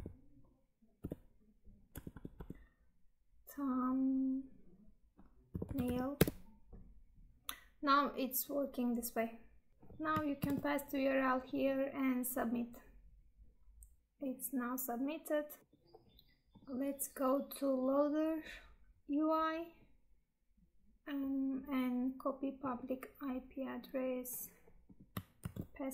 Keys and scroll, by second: 10.4 ctrl+v, 25.4 ctrl+v.